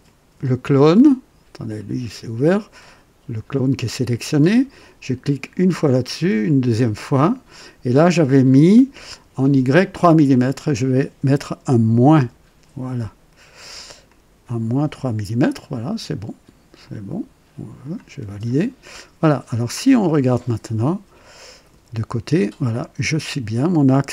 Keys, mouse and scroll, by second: 0.0 click, 1.7 click, 5.5 click, 6.5 click, 10.3 click, 12.1 KP_Subtract, 14.1-15.8 drag, 16.8-18.1 drag, 18.4 click, 19.5-21.4 drag, 21.7 KP_3, 22.3 scroll up 1, 22.8 right click.